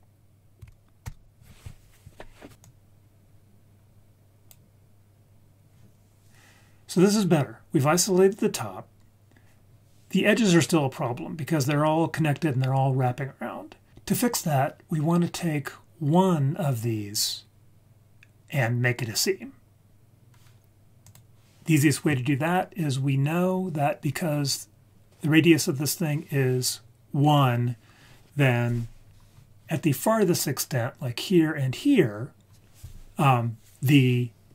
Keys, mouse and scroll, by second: 2.6-4.5 drag, 23.1-23.6 scroll down 3, 24.0-24.4 scroll up 2.